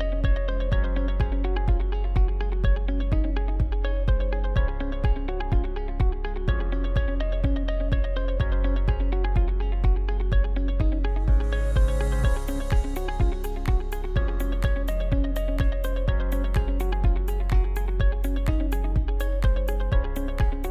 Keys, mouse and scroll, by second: 5.2 shift+h, 6.2 right click, 6.9 middle click, 7.3-9.3 scroll up 1, 9.3-11.3 shift+middle drag, 11.3 alt+h, 11.5 right click, 12.5 Tab, 15.0 click, 15.6 right click, 16.1 scroll down 1, 16.4-17.1 middle drag, 17.1 shift+right click, 17.5 x, 19.0-19.9 middle drag, 19.9 scroll up 2.